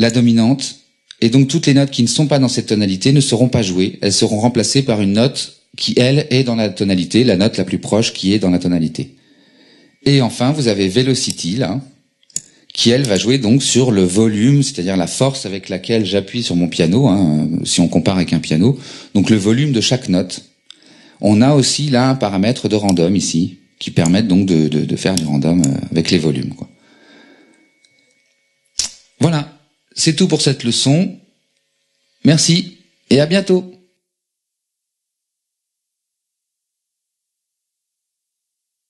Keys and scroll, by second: 13.8 BackSpace.